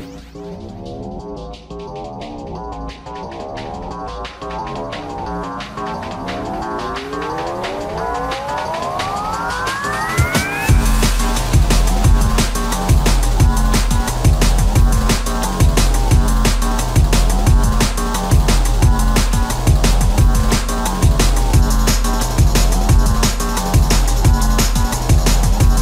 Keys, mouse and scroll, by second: 0.8 shift+middle click, 5.3 shift+r, 6.9 shift+middle click, 7.8 shift+middle click, 8.7 f, 12.7 shift+middle click, 13.9 space, 20.4 space, 23.4 m.